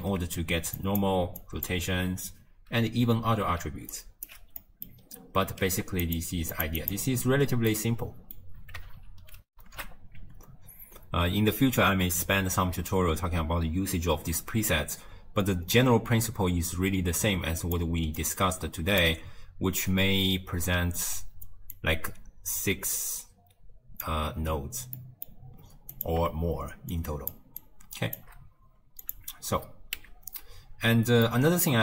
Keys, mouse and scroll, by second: 0.1-0.6 scroll up 1, 0.6-4.4 typing, 0.8 click, 1.4 click, 4.0 right click, 4.7 middle click, 5.1-6.1 scroll down 9, 6.1 click, 6.9 click, 7.3 ctrl+x, 7.7-9.5 middle drag, 9.5 ctrl+alt+shift+q, 17.7 click, 18.2 click, 21.8 click, 25.0 middle click, 26.0 click, 27.0 shift+click, 27.7 shift+click, 29.1 click, 30.0 x, 31.3 middle click.